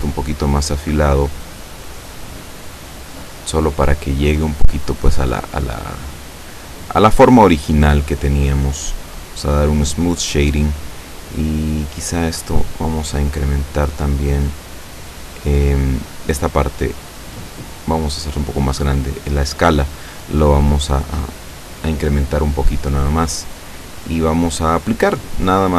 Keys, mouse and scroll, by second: 2.0-3.4 drag, 3.8-4.8 drag, 5.8-8.3 middle drag, 8.3 scroll up 1, 9.5 click, 12.0-14.7 drag, 17.2-18.9 drag, 22.2-22.8 scroll down 1, 22.8-25.4 middle drag.